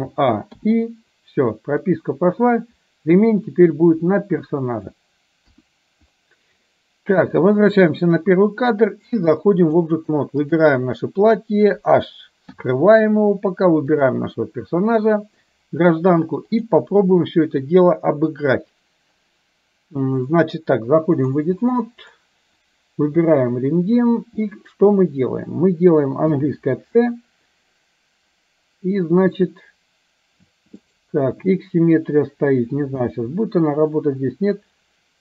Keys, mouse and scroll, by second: 0.0 a, 0.6 i, 2.0-5.0 drag, 5.5 KP_1, 7.5 click, 9.3-9.9 drag, 10.4 click, 12.6 h, 13.9 click, 16.8-21.5 drag, 26.3 c, 33.0 c.